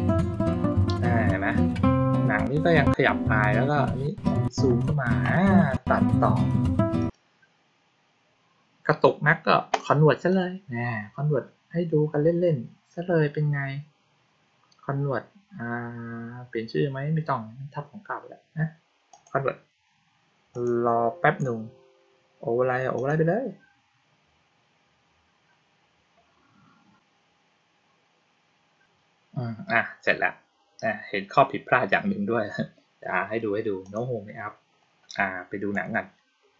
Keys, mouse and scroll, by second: 6.9 click, 10.2 click, 19.0 click, 20.4 click, 22.8 click, 33.7 click, 35.6 click.